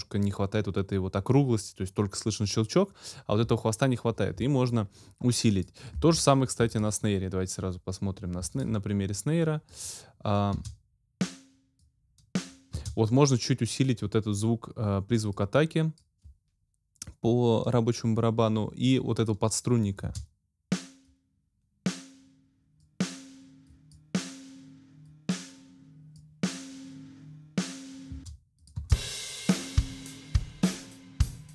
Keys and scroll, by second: 10.5 space, 12.8 space, 20.0 space, 28.1 space.